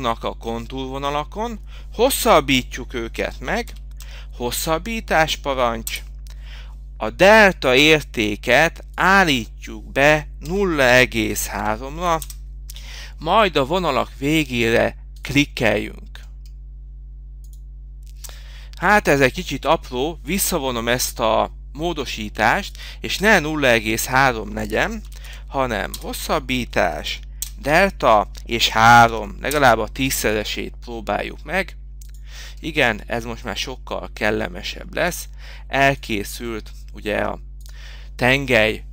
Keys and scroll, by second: 34.0 m.